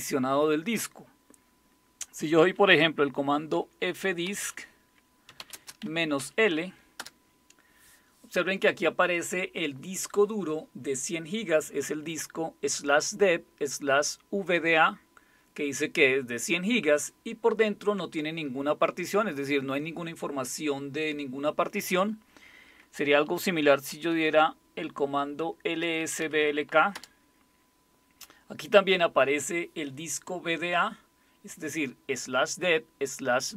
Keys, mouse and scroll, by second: 3.5-6.7 typing, 7.0 Return, 23.6-26.7 typing, 26.9 Return.